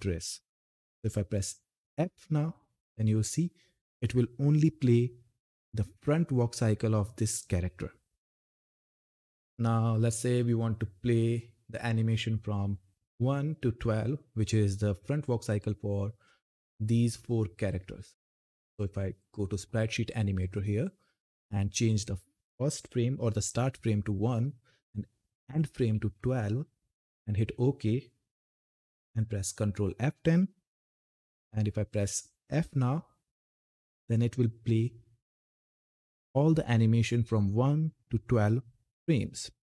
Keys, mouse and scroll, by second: 1.7 f, 9.5-10.4 scroll down 1, 13.6 scroll up 1, 18.5-21.6 drag, 24.2 click, 29.0 ctrl+F10, 30.6 s, 33.2 f.